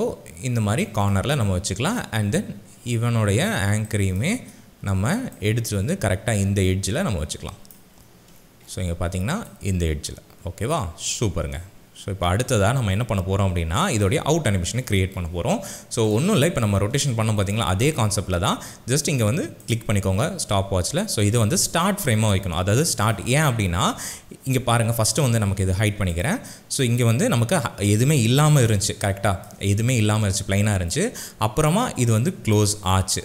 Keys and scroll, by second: 3.7 space, 28.9 space.